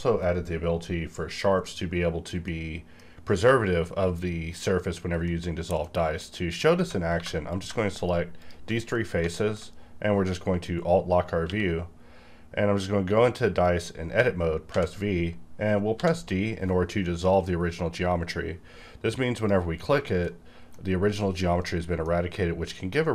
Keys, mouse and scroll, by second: 2.5 middle click, 3.5 scroll up 1, 4.2-5.2 scroll down 1, 5.2-6.7 middle drag, 6.7 Tab, 7.2 3, 7.4 click, 7.5 click, 7.9 shift+click, 8.8 middle click, 8.9-11.4 middle drag, 11.4 q, 13.6 click, 14.7 v, 15.9 d, 17.5-18.0 scroll down 1, 18.0-19.4 scroll up 1, 19.4 click, 20.4-23.1 middle drag.